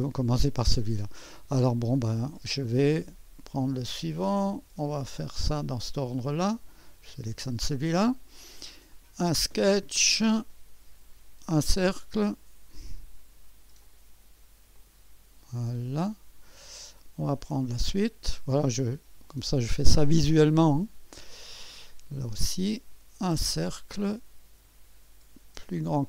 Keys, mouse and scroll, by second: 2.7-5.4 drag, 6.5 click, 8.9-10.0 drag, 11.8-12.8 drag, 13.8-16.7 drag, 16.8-18.4 drag, 19.2-20.2 drag, 21.2-22.3 drag, 23.5-24.6 drag, 25.7 click.